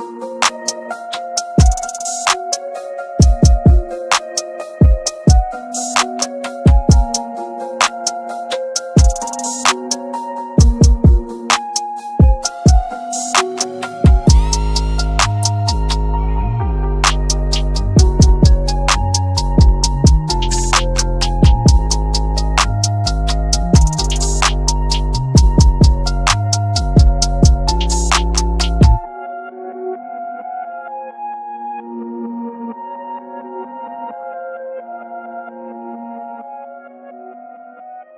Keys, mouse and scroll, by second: 2.5-2.9 scroll up 1, 2.9 click, 4.3 scroll down 1, 5.4 scroll up 1, 6.9 ctrl+space, 8.0-16.9 drag, 17.2 right click, 18.4 click, 20.0 ctrl+z, 20.7-24.6 drag, 24.6 ctrl+g, 24.9 click, 25.9-26.2 scroll down 1, 26.2 F2, 26.8-29.5 drag, 29.5 F9, 32.9 F9.